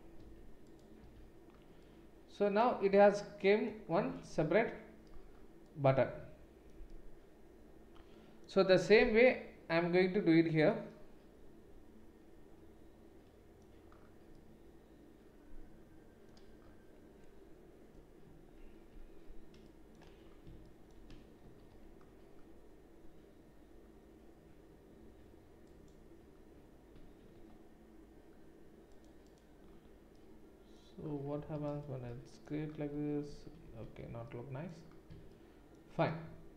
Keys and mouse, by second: 1.2 Tab, 18.7 Tab, 21.4 ctrl+r, 27.2 ctrl+r, 31.6 Tab, 33.3 ctrl+z, 33.6 ctrl+z.